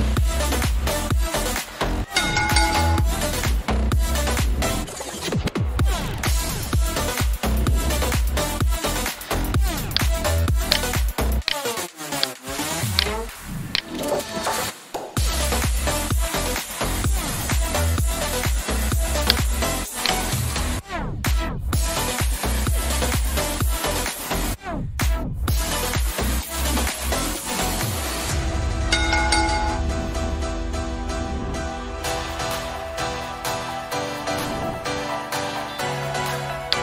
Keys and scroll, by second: 14.5 F5, 20.5 r, 21.6 e, 22.2 Return.